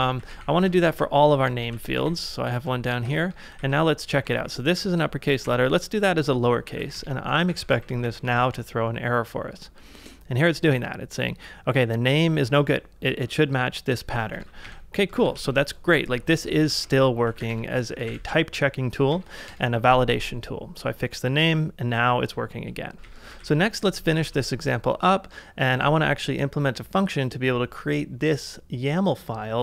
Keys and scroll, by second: 0.0-5.5 typing, 6.7 shift+;, 7.5 ctrl+a, 7.7 j, 8.1 Up, 8.4 Return, 14.4 ctrl+a, 15.2 ctrl+a, 16.3-18.1 typing, 18.0 ctrl+a, 19.2 Up, 19.5 Return, 22.9 ctrl+a, 23.3 ctrl+a, 24.1 ctrl+w, 25.7 j.